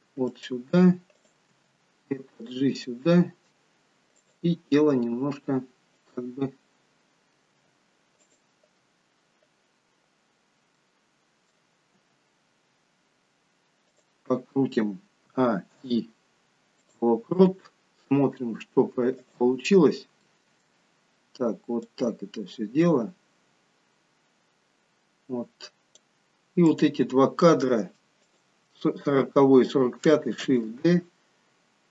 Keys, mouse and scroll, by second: 1.1 click, 1.5 g, 2.8 middle click, 4.2 click, 5.9 g, 7.4 g, 10.8 middle click, 12.0 g, 15.2 a, 15.8 i, 19.1 click, 19.8-20.3 scroll down 2, 20.3 middle click, 21.9 click, 26.7 click, 28.1 shift+click, 30.4 shift+d.